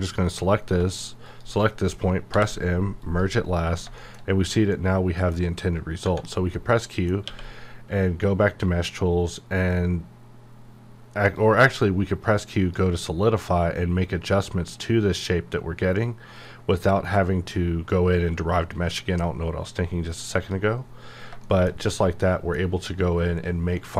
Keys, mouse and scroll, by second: 0.1 g, 0.4 right click, 1.3 shift+click, 2.3 m, 3.0 click, 3.7 scroll down 1, 4.0 shift+middle click, 4.3-4.7 scroll down 1, 4.7-6.0 middle drag, 6.0 Tab, 6.2-6.5 scroll down 1, 6.5 middle click, 7.2 q, 11.7-15.2 drag, 20.3 click, 21.4-23.9 shift+middle drag.